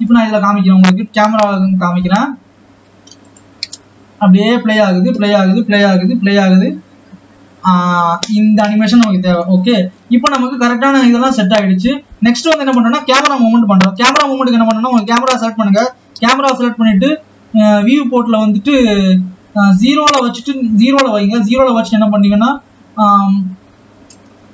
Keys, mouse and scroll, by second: 0.4 click, 0.7-1.8 scroll down 2, 1.8 scroll up 2, 3.3 click, 3.8 space, 9.7 space, 10.1 ctrl+s, 10.9 scroll down 3, 11.7 click, 14.9 KP_0, 16.3 n.